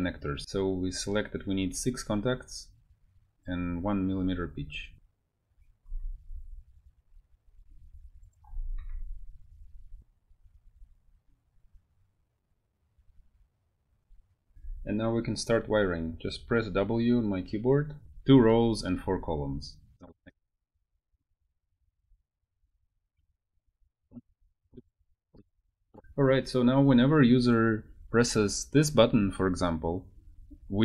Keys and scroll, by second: 5.7 ctrl+c, 6.3 alt+Tab, 8.4 ctrl+a, 8.6 ctrl+v, 8.8 Return, 14.5 w, 21.3 w, 22.1 w, 23.1 Escape, 23.8-25.3 typing, 25.9 Escape.